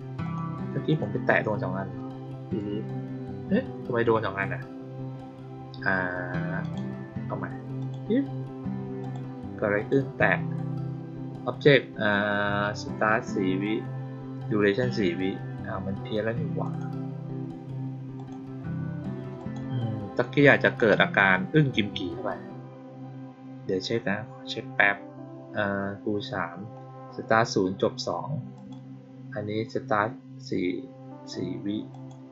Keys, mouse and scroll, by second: 0.2 click, 0.8 click, 6.5 click, 7.7 click, 8.9 click, 9.7 click, 16.6 click, 18.1 click, 19.3 click, 20.7 click, 28.5 click, 31.8 click.